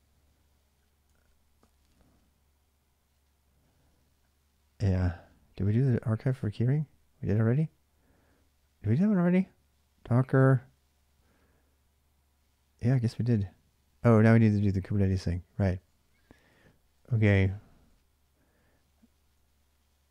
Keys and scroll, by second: 0.9-1.3 k, 1.2 w, 5.2-5.8 k, 9.9-10.9 typing, 13.9-14.4 j, 14.7-15.2 j, 15.6-16.1 j, 16.3 j, 18.2-20.1 typing.